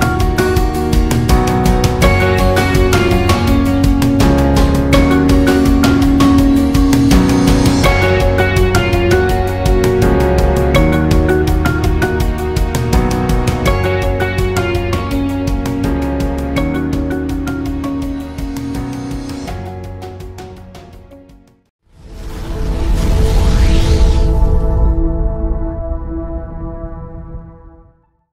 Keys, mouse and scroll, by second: 0.4 ctrl+s, 0.9 click, 2.1 Delete, 2.9 click, 3.8 Delete.